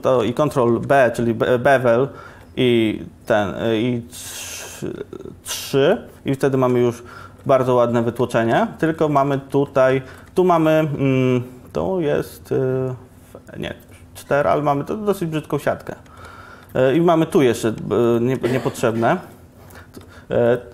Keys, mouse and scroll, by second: 5.8 Tab, 6.6 ctrl+1, 9.0 Tab.